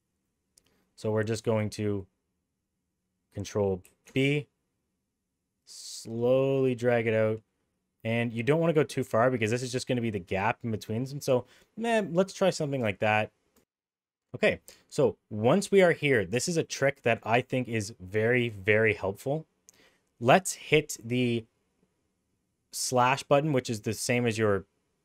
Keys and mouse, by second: 3.8 ctrl+b, 13.5 ctrl+z.